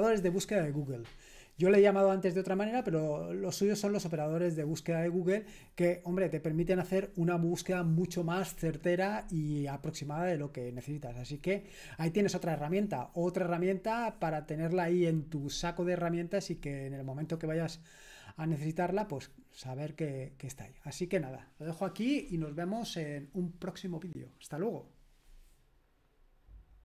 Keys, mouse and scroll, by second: 26.7 click.